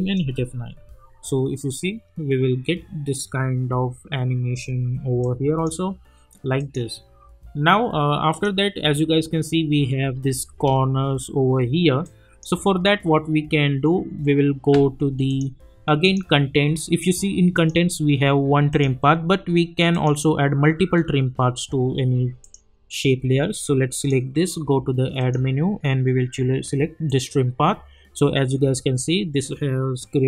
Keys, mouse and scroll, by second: 0.2 space, 4.5 space, 5.2-6.6 drag, 10.0 space, 12.0 click, 13.3 scroll down 1, 15.3 click, 21.3 scroll down 1, 22.4 click.